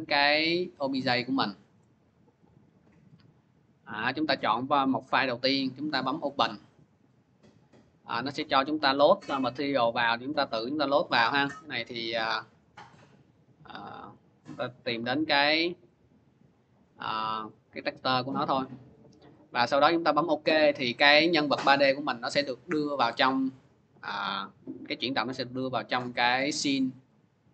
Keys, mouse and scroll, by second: 0.9 click, 1.1 click, 1.6 click, 1.8 click, 2.3 click, 2.5 click, 3.1 click, 6.2 click, 7.8 click, 9.7 click, 10.8 click, 11.6 click, 12.9 click, 13.8 click, 13.9 click, 14.9 click, 15.1 click, 15.8 click, 16.4 click, 18.7 click, 19.9 click, 22.4-25.0 drag.